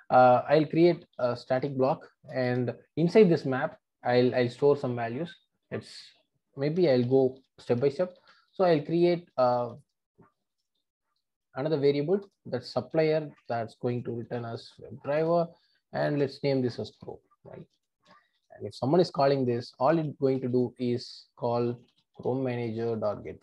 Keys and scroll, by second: 1.6 Return, 12.3 Return, 15.2 Return, 22.6 Return.